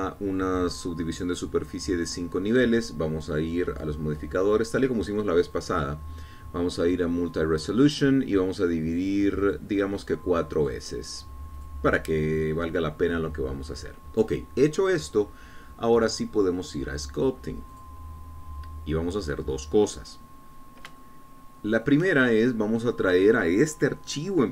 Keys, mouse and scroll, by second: 0.8-1.2 scroll up 2, 1.3 scroll down 2, 2.1-3.7 middle drag, 4.8 click, 5.8 click, 6.6 click, 8.8 click, 10.4 click, 11.1 click, 11.7 click, 12.6 click, 18.8 click, 21.2-21.9 scroll up 2, 22.1-23.6 shift+middle drag.